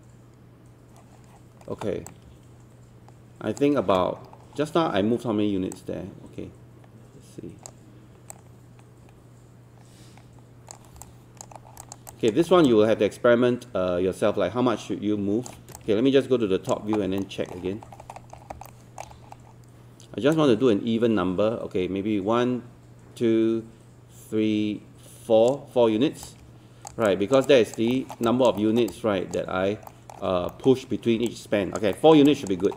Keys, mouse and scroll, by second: 2.1-4.0 drag, 4.0-4.4 scroll down 1, 4.4 scroll up 1, 4.9-5.7 scroll down 1, 5.7-11.0 drag, 11.0 alt+click, 11.8 alt+click, 12.1 alt+click, 12.4 scroll up 1, 12.7-15.5 alt+drag, 15.8 click, 17.2 alt+middle click, 18.5 alt+scroll up 1, 18.7 alt+middle click, 19.1 scroll up 1, 20.4-26.9 drag, 27.1 alt+click, 28.0 alt+middle click, 28.3 alt+click, 28.6 alt+middle click, 28.9 alt+click, 29.9 alt+middle click, 30.5 alt+middle click, 31.3 alt+click, 32.0 alt+middle click, 32.3 alt+click.